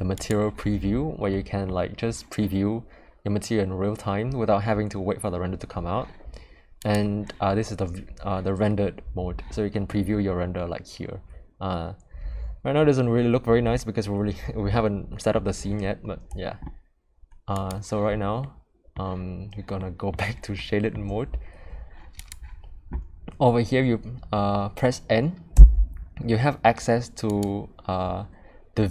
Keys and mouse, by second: 0.1 click, 1.3 middle click, 6.8 click, 9.8-15.3 middle drag, 17.5 click, 18.4-18.9 middle drag, 19.7-20.1 middle drag, 20.5 middle click, 22.2 click, 25.5 n, 27.2 click.